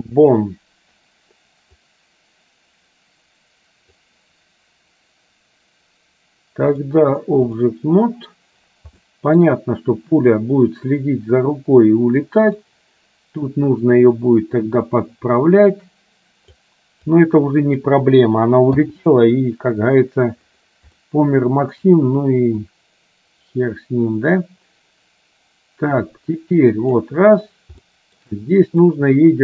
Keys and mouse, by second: 2.0-4.1 drag, 6.9 click, 9.1 shift+middle click, 12.4 click, 13.5-16.6 drag, 17.3 click, 21.1 shift+middle click, 22.9-27.3 drag, 28.0 shift+middle click, 29.0-29.4 drag.